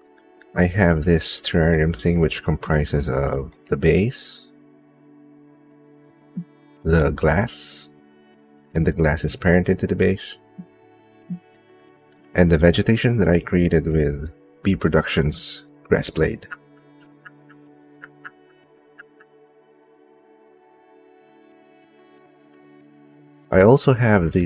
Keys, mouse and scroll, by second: 0.7 click, 2.5 shift+click, 6.5 click, 8.7 shift+middle click, 11.6 shift+middle click, 15.6-17.0 drag, 18.8-20.3 drag, 23.4 ctrl+middle click.